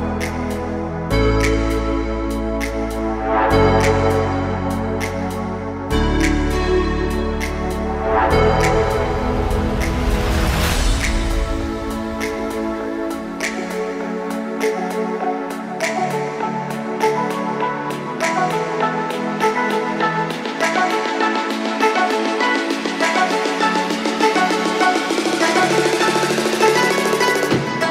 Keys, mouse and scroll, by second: 0.0 click, 3.4 click, 4.6-6.6 middle drag, 6.8-7.3 scroll up 1, 7.3 scroll up 1, 7.9 click, 10.1 click, 10.9 click, 11.5-14.6 drag, 15.3 click, 19.5-21.7 drag, 22.3-24.3 middle drag, 24.3 click, 24.7-27.8 middle drag.